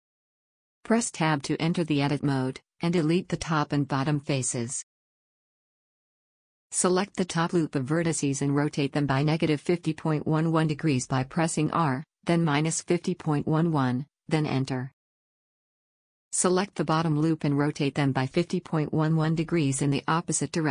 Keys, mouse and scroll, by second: 0.8-2.5 drag, 1.1 Tab, 3.4 middle click, 4.3-5.5 right drag, 4.6 x, 7.7 click, 8.7 r, 13.7 a, 17.4-19.4 drag, 18.2 r.